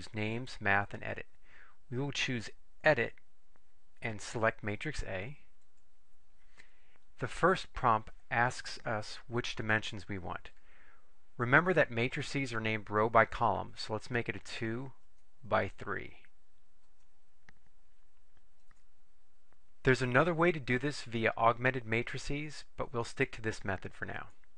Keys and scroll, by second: 3.5 Right, 5.7 Return, 15.3 2, 17.0 Right, 18.9 3, 24.3 Return.